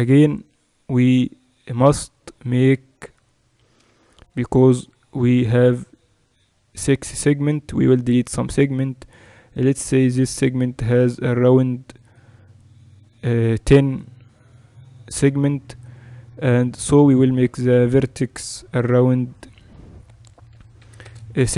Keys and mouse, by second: 0.5-2.0 middle drag, 18.4 F6.